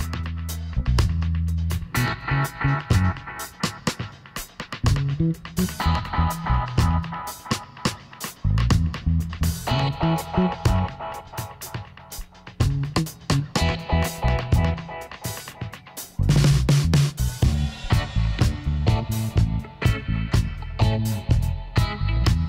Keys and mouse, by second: 1.9-7.5 middle drag, 7.5-9.3 right drag, 7.7 Tab, 9.3-10.9 middle drag, 11.0 ctrl+r, 14.4 Tab, 14.5-16.5 middle drag, 17.5-19.5 middle drag, 19.3-21.2 drag, 19.5 Tab, 21.5-22.4 drag.